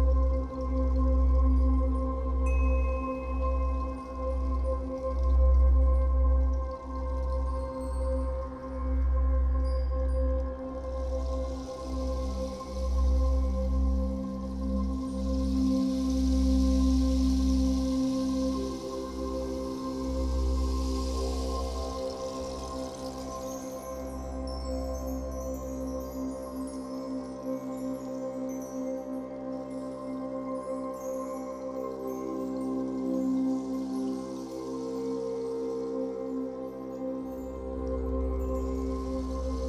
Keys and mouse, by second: 4.0 b, 5.4 click, 9.4 alt+click, 10.0-11.0 typing, 12.1 click, 15.0-15.7 typing, 17.5 typing, 18.5 click, 22.2 z, 23.9 v, 24.2 click, 24.6 t, 25.2 click, 25.6 click, 26.4 Return, 27.3 click, 33.5 alt+click, 34.2 click.